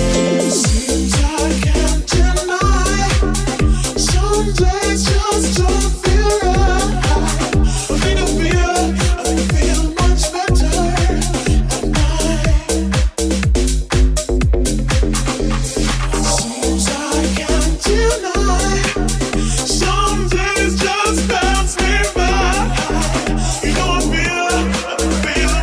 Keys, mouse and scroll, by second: 2.7 g, 11.5 r, 16.9 alt+click, 16.9-25.6 alt+middle drag, 20.4 ctrl+z, 20.9 right click, 21.2 s.